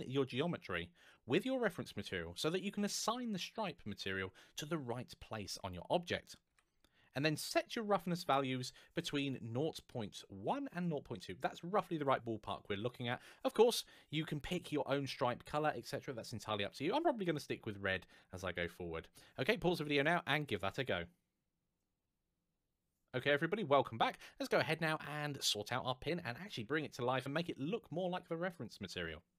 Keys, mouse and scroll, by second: 6.7 typing, 29.2 click.